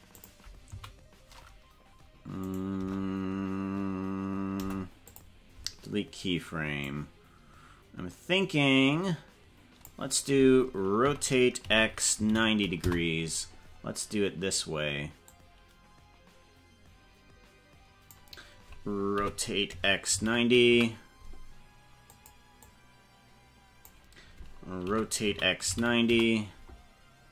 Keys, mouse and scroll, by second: 0.1 click, 0.7 Right, 2.4 right click, 2.7 BackSpace, 4.5 Delete, 6.8-9.9 drag, 11.0 r, 15.3-18.2 drag, 19.1 r, 22.1 click, 22.7-23.9 drag, 24.8 r.